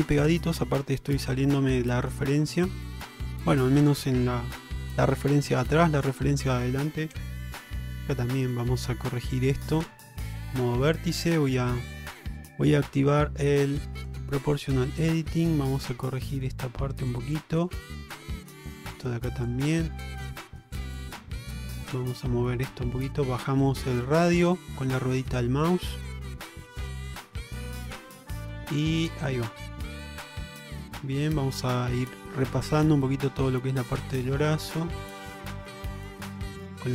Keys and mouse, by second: 1.2-2.2 middle drag, 2.7 alt+z, 3.8 click, 4.8 Tab, 5.6 click, 7.2 1, 8.1 alt+z, 8.8 alt+z, 9.6 click, 14.1 click, 15.4-17.2 drag, 17.5 shift+middle click, 18.6 click, 19.6 click, 20.5 shift+middle click, 20.9 click, 21.9-25.0 drag, 25.5 shift+middle click, 26.6 click, 28.3 click, 30.2 shift+middle click, 30.7 shift+middle click, 31.6 shift+middle click, 33.7 click, 34.5 click, 35.6 shift+middle click, 36.3 click.